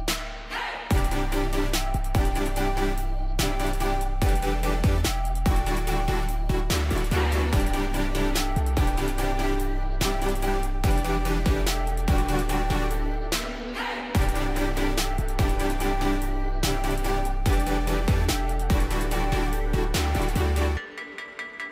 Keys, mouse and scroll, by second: 2.2 ctrl+click, 3.7 click, 8.1 shift+click, 9.7 click, 11.8 alt+click, 12.8 ctrl+click.